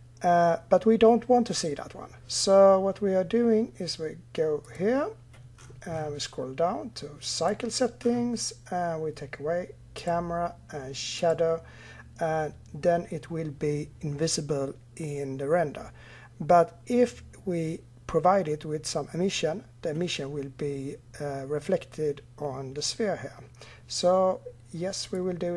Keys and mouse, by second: 4.4-16.7 drag, 25.0-25.5 drag.